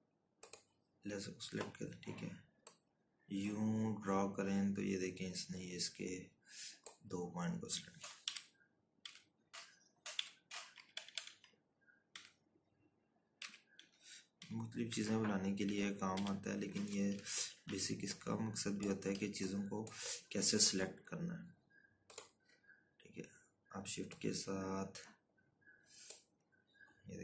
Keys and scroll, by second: 7.6 shift+Down, 8.7 Left, 9.5 ctrl+-, 9.6 ctrl+-, 10.6 Down, 12.3 shift+Right, 13.5 shift+Down, 14.2 shift+Down, 16.1 shift+z.